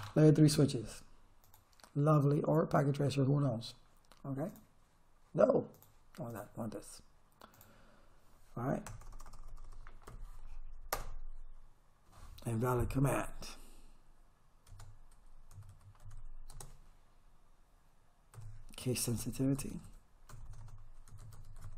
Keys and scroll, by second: 9.0 Return, 10.1 Up, 10.9 Return, 14.7 Caps_Lock, 15.5 s, 16.0 h, 16.5 space, 18.4-21.7 typing.